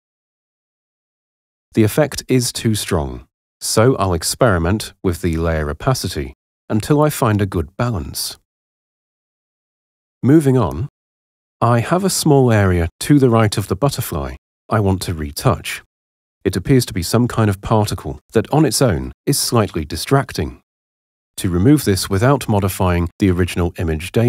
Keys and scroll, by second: 2.2 h, 10.7 super+0.